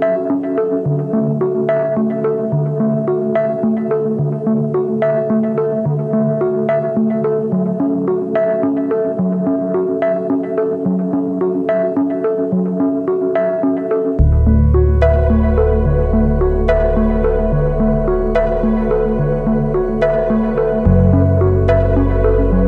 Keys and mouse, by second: 0.0 x, 0.6 shift+middle click, 0.7 1, 0.9 click, 1.7 ctrl+l, 2.3-4.3 typing, 4.8 shift+middle click, 5.1 middle click, 6.5 shift+middle click, 8.4 3, 9.6 click, 10.4 ctrl+click, 11.3 ctrl+click, 12.1 ctrl+click, 12.9 ctrl+click, 13.5 c, 17.9 f, 18.4 a, 19.1 ctrl+s, 19.5 shift+middle click, 20.8-22.3 middle drag.